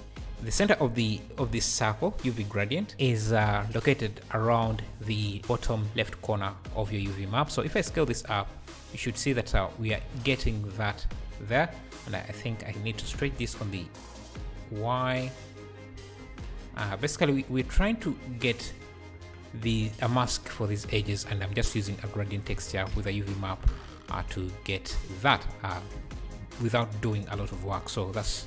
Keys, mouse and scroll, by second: 6.5-7.6 scroll down 2, 7.6 s, 7.8 s, 10.2 `, 12.1 scroll down 1, 13.0 s, 15.9 s, 18.7 Tab, 19.1-20.1 scroll up 3, 20.1 scroll up 1, 22.1-23.7 drag, 23.7 Tab, 24.2 Tab, 24.4 `.